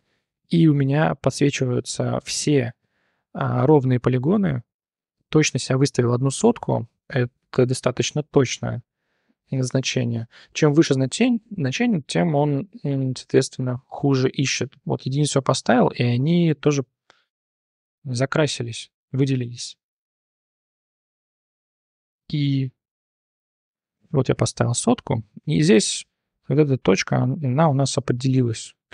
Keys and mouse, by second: 0.2 click, 1.9 i, 3.8 click, 9.0 click, 13.3-14.8 drag, 17.7 click, 19.9 ctrl+z, 21.4 n, 22.5-24.0 drag, 25.4 1, 25.6 click, 26.0 click, 26.7 click, 28.7 click.